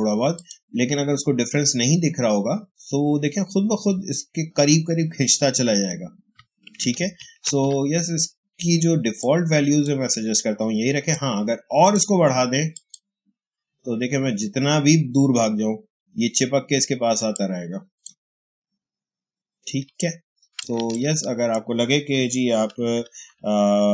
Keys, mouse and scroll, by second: 0.2 click, 6.6 click, 6.9 ctrl+z, 7.6 Escape, 9.1-12.6 drag, 17.1 space, 17.2 click, 17.6 space, 19.9 click, 20.2 space, 20.8-22.4 ctrl+drag, 22.4 ctrl+-.